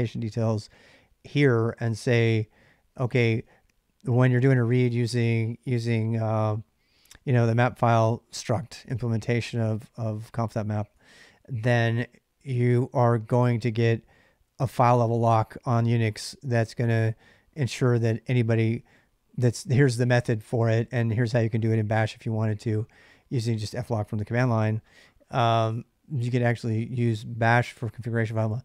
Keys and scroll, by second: 0.0-10.7 typing, 28.2-28.6 typing.